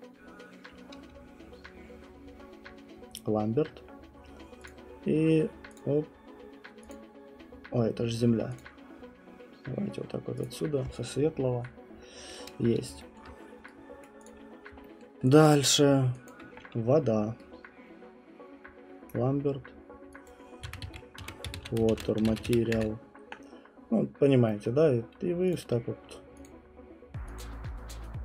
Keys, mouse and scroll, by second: 3.2 right click, 4.6 click, 5.7 click, 6.9 click, 8.6 click, 10.4 click, 12.4-12.8 scroll, 13.2-14.0 alt+middle click, 13.3 scroll, 14.0 right click, 14.2 click, 14.5 middle click, 14.7 middle click, 15.0 alt+middle click, 15.5 alt+click, 16.3 alt+click, 19.1 right click, 20.2 click, 20.4-22.9 typing, 24.3 typing, 24.6 middle click, 25.5 click, 26.4 click, 27.4 click.